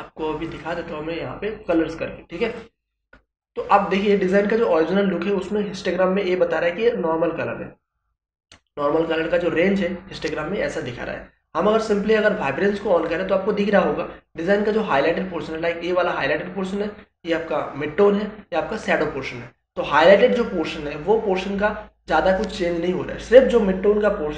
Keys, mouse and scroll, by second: 13.0 click.